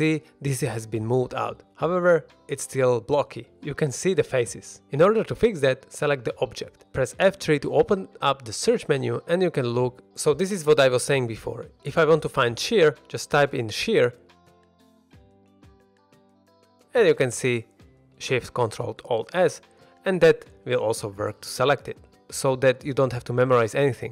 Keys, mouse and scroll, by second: 0.1 shift+middle drag, 0.5-1.2 middle drag, 1.9-2.2 middle drag, 2.5-2.9 scroll up 2, 2.9 middle click, 3.9 scroll down 1, 4.1 middle drag, 4.8 middle click, 6.2 click, 8.2 F3, 20.3 click, 20.8 middle drag, 21.1 ctrl+Tab, 21.9 shift+middle click, 22.2 ctrl+Tab, 22.7 ctrl+Tab, 23.4 ctrl+Tab, 23.8-24.1 middle drag.